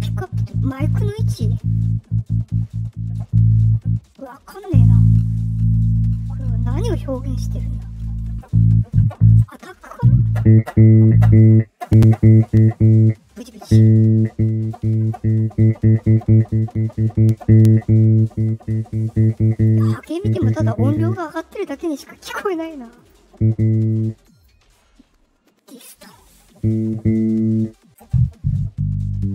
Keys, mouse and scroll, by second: 1.7-9.2 drag, 14.0-19.6 drag, 21.0-22.3 drag, 22.5 right click, 22.9 click, 23.8-24.4 drag, 26.1-29.3 drag.